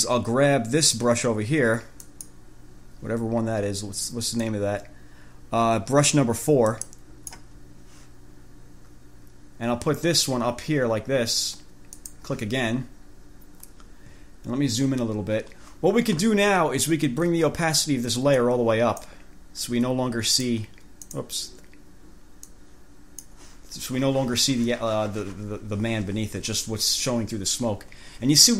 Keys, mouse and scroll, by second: 2.2 click, 4.6-7.2 drag, 6.9 right click, 12.1 click, 14.9 ctrl+scroll up 2, 18.6 click, 20.5 click, 21.3 click, 22.7 click.